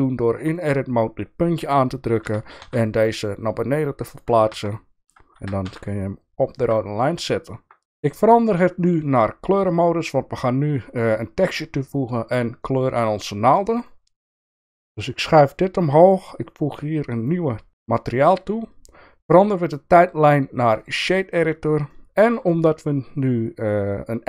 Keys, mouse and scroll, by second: 0.5 click, 2.2 g, 4.5 Tab, 5.3 g, 9.5 click, 16.0 click, 17.2 click, 19.3-20.8 drag, 21.9 shift+middle click, 23.3 click.